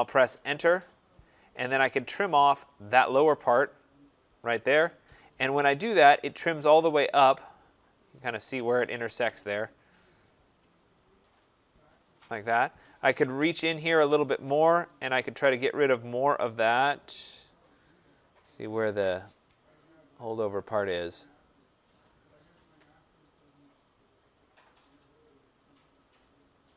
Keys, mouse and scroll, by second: 0.3 Return, 2.6 click, 3.5 click, 5.3 scroll, 5.4 middle click, 9.0-9.5 scroll, 9.1 right click, 10.0 scroll, 11.1 right click, 11.4-11.9 scroll, 12.0-13.1 scroll, 13.8-15.6 scroll, 16.1-16.4 scroll, 16.7 scroll down 5, 18.2 scroll, 18.6 right click, 19.1-20.6 scroll, 24.5 middle click, 25.3 click, 26.5 click.